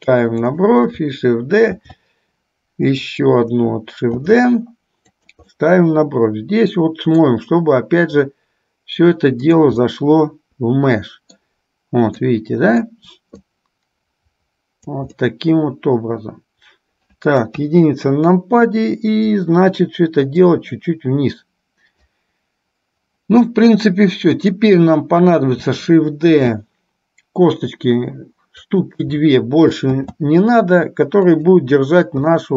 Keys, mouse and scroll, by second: 5.7-7.5 middle drag, 8.5-9.7 drag, 9.9-11.7 middle drag, 12.4 middle click, 13.5 click, 13.8-15.0 drag, 15.3-17.8 middle drag, 17.8 KP_1, 20.7-22.2 drag, 24.5 click, 26.5 shift+d, 30.2 shift+d, 32.4-32.5 middle drag.